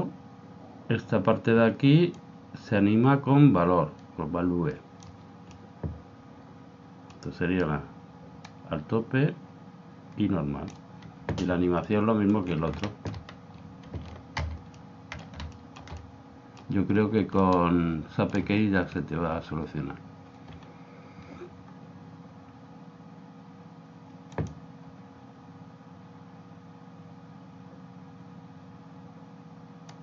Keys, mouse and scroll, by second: 2.1 click, 5.5-7.8 middle drag, 8.5 click, 11.9-14.6 middle drag, 14.4 alt+a, 15.1-21.4 middle drag, 22.4 middle click.